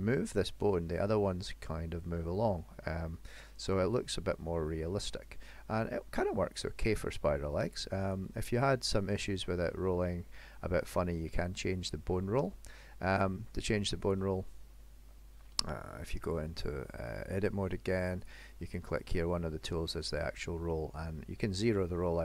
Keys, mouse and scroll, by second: 0.0 g, 4.3 middle click, 4.9 g, 8.6 middle click, 14.1 click, 18.3 click.